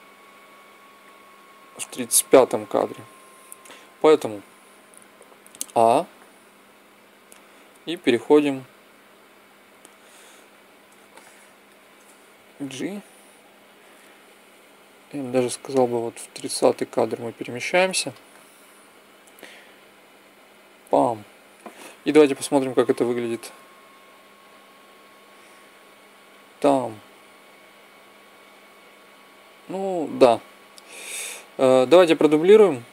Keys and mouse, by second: 2.6-4.5 drag, 5.3 a, 5.6 a, 10.4-13.6 middle drag, 12.4 g, 19.2-21.0 drag, 22.7-24.4 drag, 24.9-26.8 drag.